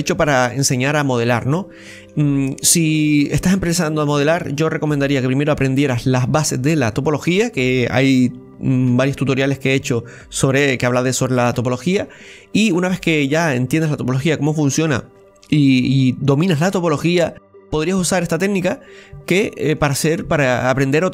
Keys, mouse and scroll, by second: 1.2-1.6 scroll up 2, 1.6-4.6 middle drag, 18.4-18.9 scroll down 1, 19.3-21.1 middle drag, 19.3-21.1 scroll down 3.